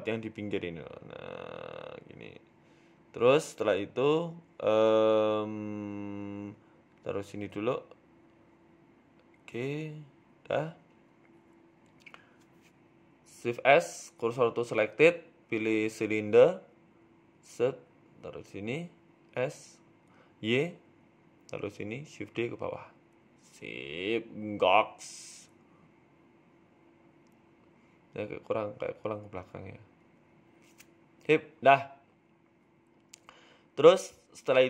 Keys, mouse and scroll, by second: 0.2 middle click, 0.4-0.7 scroll down 5, 0.6 middle click, 1.3 g, 3.0 middle click, 4.7 KP_3, 5.0 KP_1, 5.4 z, 5.9-6.3 scroll up 3, 6.1 shift+middle click, 7.0 g, 8.1 g, 10.0 middle click, 11.1 g, 12.3 KP_3, 13.2 scroll up 2, 13.5 g, 14.3 Tab, 14.9 shift+s, 15.9 shift+a, 17.7 r, 18.7 s, 20.0 s, 22.6 g, 23.7 shift+d, 25.2 Tab, 25.3 scroll down 3, 25.5 middle click, 25.9 z, 26.6 middle click, 27.5 scroll up 3, 27.6 Tab, 28.3 click, 31.4 click, 31.4 g, 32.3 Tab, 32.4 scroll down 3, 32.6 middle click, 33.7-34.6 scroll down 9.